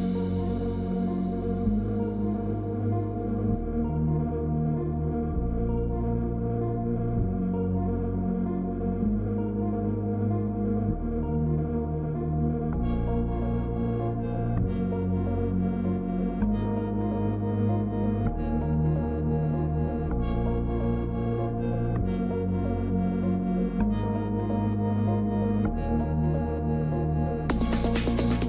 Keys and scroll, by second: 8.1 ctrl+t.